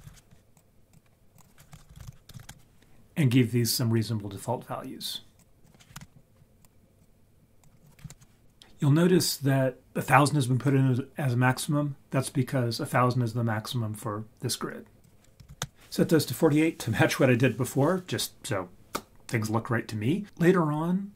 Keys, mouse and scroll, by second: 1.8 shift+click, 5.6 click, 7.0-7.6 drag, 15.0 click.